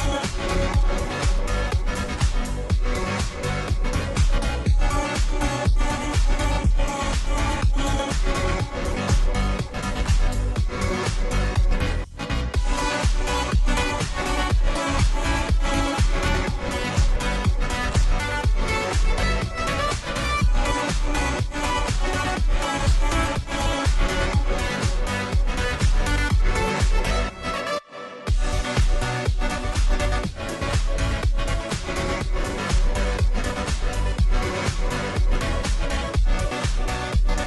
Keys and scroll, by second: 10.4 space, 13.0 Return, 14.6 ctrl+j, 18.8-19.6 space, 22.4 Return, 30.0 ctrl+g, 32.3-34.6 typing, 36.4 ctrl+j.